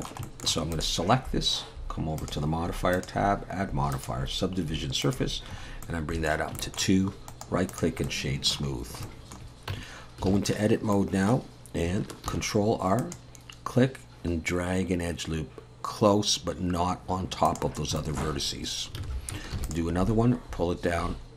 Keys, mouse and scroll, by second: 0.2 shift+middle click, 0.7 click, 2.2 click, 2.9 click, 5.0 click, 5.6-6.0 scroll up 3, 5.8 middle click, 6.6 shift+middle click, 7.3 right click, 8.8 middle click, 9.0 shift+middle click, 9.7 Tab, 10.3 alt+a, 10.9 middle click, 12.3 ctrl+r, 18.0 shift+middle click, 18.4 scroll up 2, 19.0 alt+a, 19.5 ctrl+r.